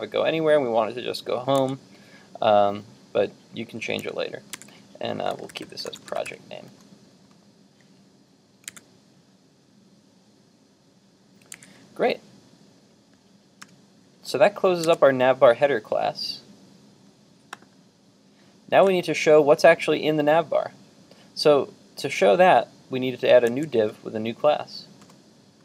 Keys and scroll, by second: 8.7 super+Tab, 14.8 super+Tab, 23.5 super+Tab.